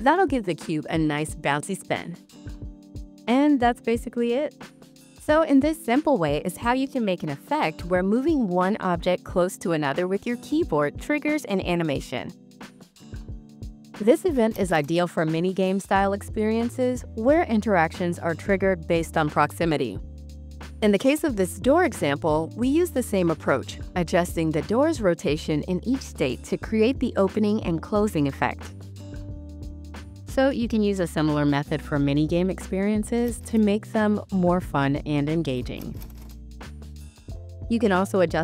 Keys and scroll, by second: 3.0 w, 4.3 s, 5.5 a, 6.1 w, 7.6 s, 9.0 w, 10.0 a, 10.9 w, 11.3 d, 12.3 s, 13.5 a, 15.0 w, 33.2-37.6 typing.